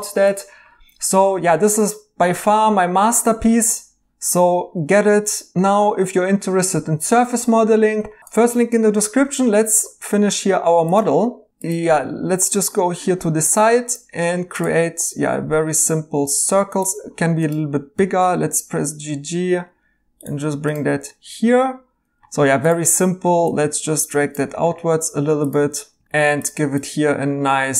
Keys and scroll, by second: 17.9 g, 22.4 3, 26.0 2.